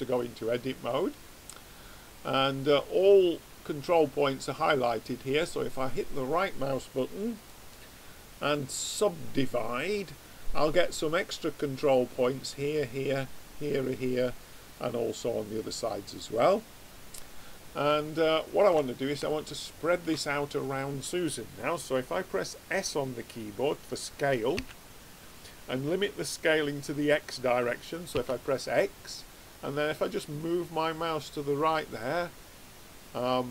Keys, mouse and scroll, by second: 2.1-3.9 middle drag, 7.3-9.1 right drag, 16.3-22.9 middle drag, 24.5 s.